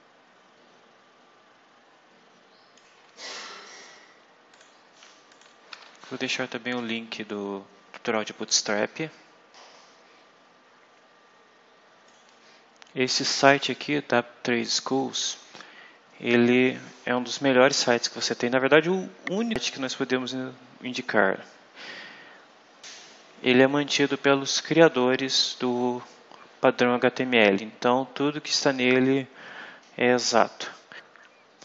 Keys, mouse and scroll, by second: 0.8 scroll up 2, 2.7 click, 4.5 click, 5.2 ctrl+click, 5.6 ctrl+v, 6.2 ctrl+KP_Enter, 12.0 click, 31.3-31.6 scroll down 2.